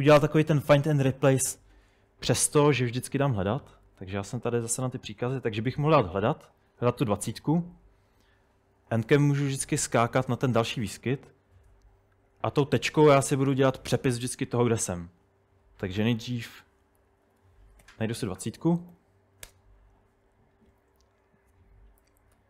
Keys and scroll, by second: 3.4 super+Tab, 3.9 super+Tab, 16.3-18.9 typing, 19.5 Return, 22.1-22.4 typing.